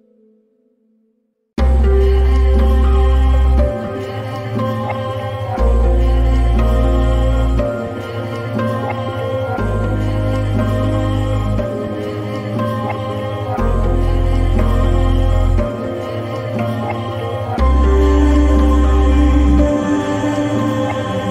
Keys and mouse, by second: 0.6-1.8 shift+middle drag, 2.0-2.5 shift+middle drag, 3.9-4.4 shift+middle drag, 5.5-5.8 shift+middle drag, 6.5-7.3 drag, 7.8 click, 10.3-11.3 shift+middle drag, 19.4 click.